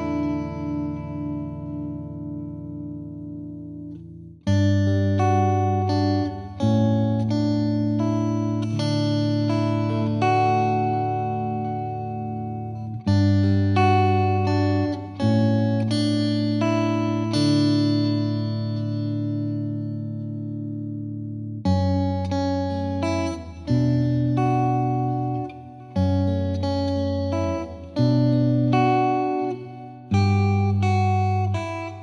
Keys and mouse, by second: 0.6-1.7 drag, 4.8-6.1 drag, 6.8-7.9 drag, 9.1-10.4 drag, 12.3 click, 15.2 click, 17.0 click, 17.8 click, 20.2 click, 21.9-23.1 drag, 23.7 click, 26.0-27.2 drag, 27.3-28.5 drag, 29.4-30.5 drag, 30.8-31.9 drag.